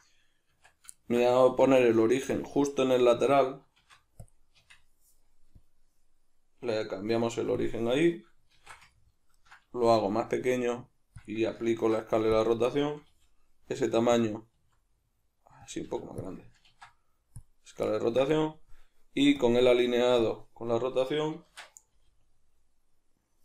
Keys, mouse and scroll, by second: 0.5 Tab, 1.5 1, 1.8 right click, 2.0-5.6 middle drag, 3.8 shift+s, 4.6 Tab, 5.6-8.9 drag, 8.5 alt+q, 8.9-11.3 ctrl+middle drag, 9.9 s, 11.3 click, 11.7 ctrl+a, 13.1 g, 14.2 click, 14.5 s, 15.8 click, 15.9 g, 16.3 click, 16.6 ctrl+a, 17.9-19.4 ctrl+middle drag, 19.4-23.4 drag, 21.4 shift+Tab, 22.0 g.